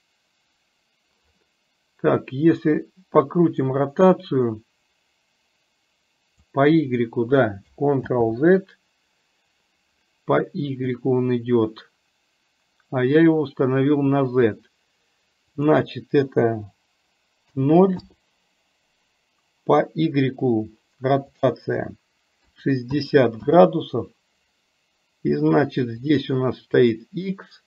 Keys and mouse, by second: 3.6-6.5 drag, 8.2 ctrl+z, 15.7-18.1 drag, 21.4-23.5 drag, 26.1 click.